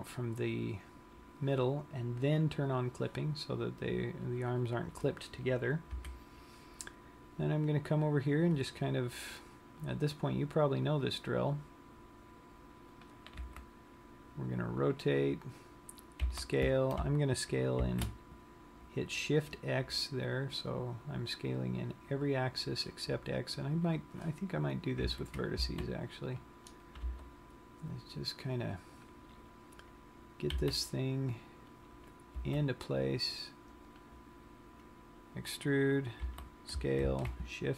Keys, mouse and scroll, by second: 0.6 click, 3.2 click, 6.4 KP_3, 8.1-9.8 scroll up 3, 10.6 click, 14.0 r, 15.6 click, 17.1 s, 22.1 click, 24.4 click, 25.9 a, 26.2 c, 27.9 g, 29.6 click, 31.1 c, 32.5 right click, 33.0 e, 34.2 click, 36.9 s.